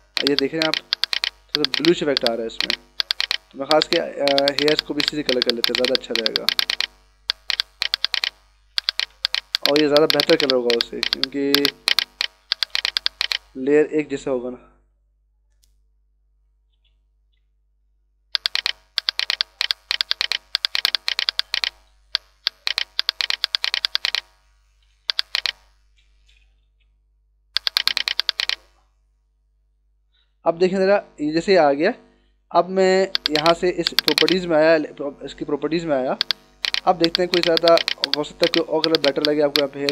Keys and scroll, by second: 7.4 [, 12.4 [, 14.1 ctrl+=, 16.7 ctrl+alt+z, 17.6 [, 24.6 [, 26.6 ctrl+alt+z, 31.3 ctrl+-, 32.1 ctrl+=.